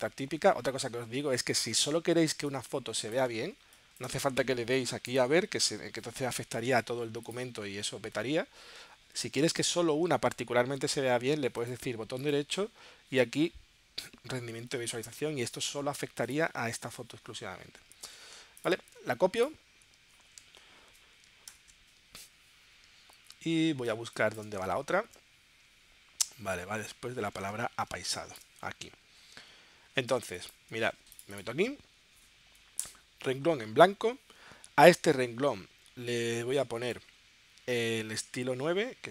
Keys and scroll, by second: 2.3 space, 20.4 super+c, 21.5 shift+super+p, 23.9 space, 25.0 super+Tab, 27.4 super+Tab, 27.9 space, 30.1 space, 32.8 Return.